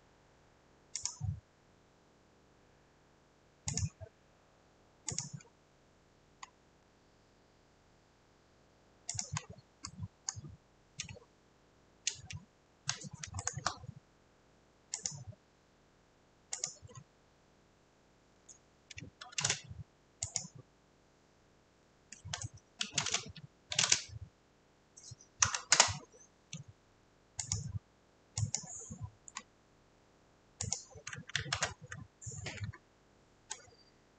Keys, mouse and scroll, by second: 1.1 click, 5.2 click, 5.5-6.0 scroll, 6.4-7.0 scroll, 9.3 click, 9.4 scroll, 10.3 scroll, 11.6 scroll, 13.5 shift+middle click, 17.0-17.5 scroll, 18.3 Escape, 19.5 f, 20.4 click, 22.3 Escape, 22.9-23.8 typing, 25.7 Return, 26.4-27.2 typing, 29.5-30.2 scroll, 29.8 click, 30.7 click, 31.6 ctrl+1.